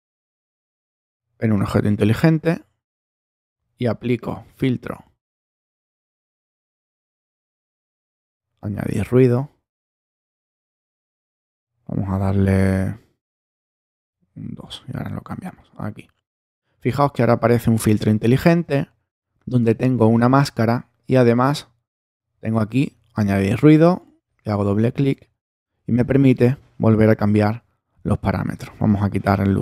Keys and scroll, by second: 14.1 2.